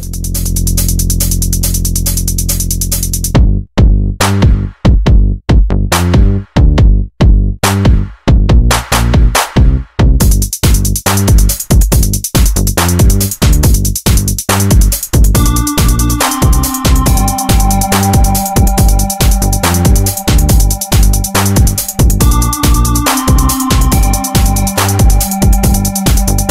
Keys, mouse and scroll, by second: 0.4 z, 1.0-3.1 middle drag, 3.1 click, 3.6 shift+click, 4.8 s, 6.6 click, 7.0 shift+click, 7.8 shift+e, 8.2 z, 9.0 click, 9.8 s, 11.8 shift+click, 13.2 e, 13.5 z, 14.4 click, 15.0 s, 17.7 click, 18.3 e, 18.6 z, 19.3 click, 19.8 s, 21.8-23.2 shift+drag, 23.2 shift+e, 23.6 z, 25.4 click, 25.9 s.